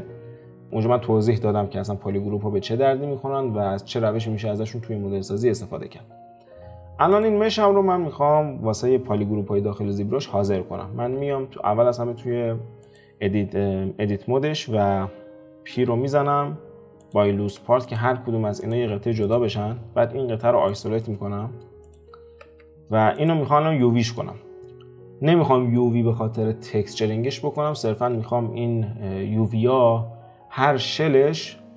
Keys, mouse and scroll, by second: 6.7-7.1 scroll up 2, 7.1 click, 11.1 Tab, 15.4 a, 15.7 p, 17.6 Tab, 17.8 click, 18.6 click, 19.2 click, 19.8 alt+q, 20.1 alt+q, 20.7 click, 21.0-21.8 middle drag, 21.8 click, 22.4 Tab, 23.8-26.9 middle drag.